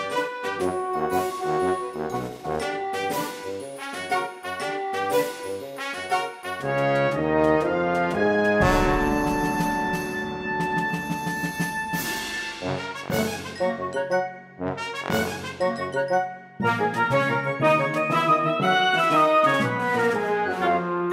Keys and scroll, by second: 0.4 space, 1.5 space, 2.1 space, 5.6 space, 8.8 space, 9.3 space, 13.2 space, 13.8 space, 15.1 space, 16.5 space, 18.3 space, 19.7 space.